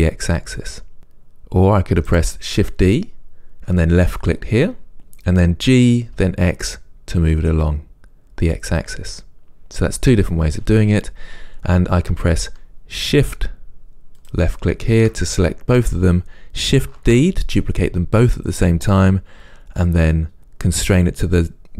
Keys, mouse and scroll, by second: 2.4 right click, 5.0 g, 10.0 click, 14.5 shift+click, 17.2 shift+d.